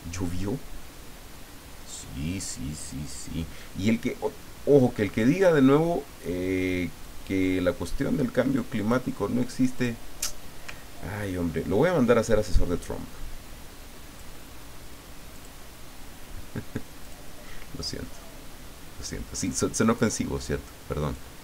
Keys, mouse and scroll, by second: 7.0-9.0 drag, 9.8 click, 11.2-15.6 ctrl+drag, 17.0 click, 17.4-18.4 middle drag, 19.4-21.4 drag.